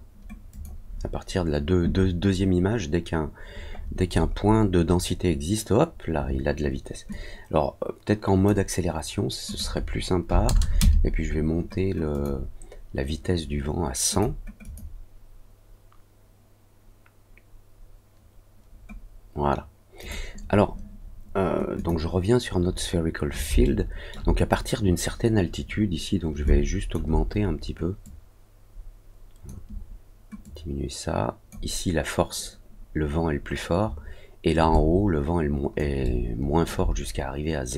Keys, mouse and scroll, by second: 0.5 click, 3.7 scroll up 1, 4.0-5.0 scroll down 3, 5.0 middle click, 7.0-8.4 drag, 9.4 click, 12.1 click, 14.1 click, 14.6 click, 19.9 click, 21.7 click, 23.6 alt+middle click, 26.4 alt+click, 28.0-29.4 drag, 30.4-31.4 drag, 34.7-35.7 alt+drag, 36.0 alt+middle click.